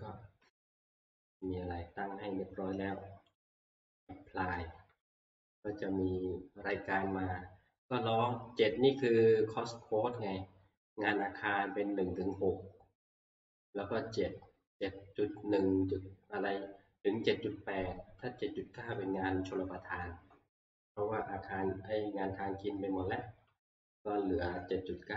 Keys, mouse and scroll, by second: 1.5 click, 3.4 click.